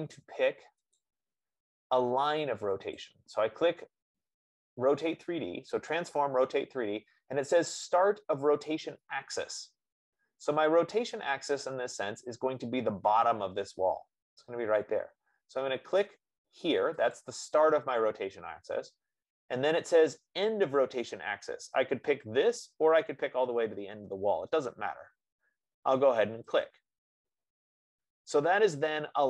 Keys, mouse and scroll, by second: 1.4 click, 3.5 click, 10.3-15.7 middle drag, 17.5-22.4 drag, 27.0-29.2 drag.